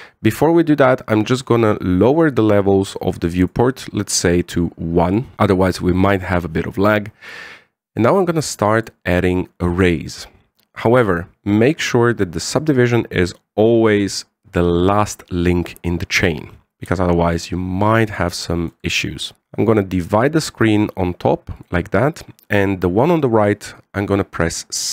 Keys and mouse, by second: 2.8 click, 4.2 click, 9.5-11.6 drag, 13.6-14.9 drag, 17.6-19.4 shift+drag, 20.9-22.4 drag.